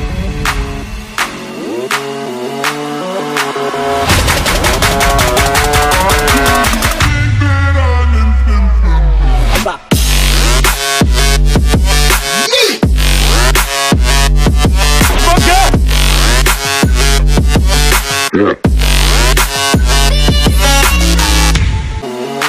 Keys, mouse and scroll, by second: 3.4-3.7 typing, 6.1 scroll down 1, 6.6-7.3 typing, 10.8 double click.